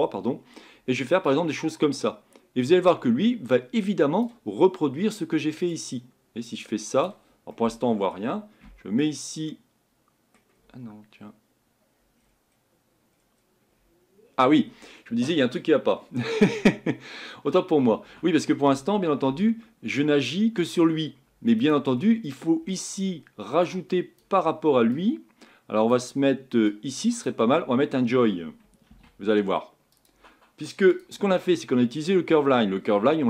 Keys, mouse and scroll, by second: 1.3-4.3 drag, 5.7-7.5 drag, 7.5-8.6 middle drag, 8.6 Tab, 9.5-10.7 middle drag, 10.7 Tab, 18.7 Tab, 19.3 Tab, 20.0 Tab.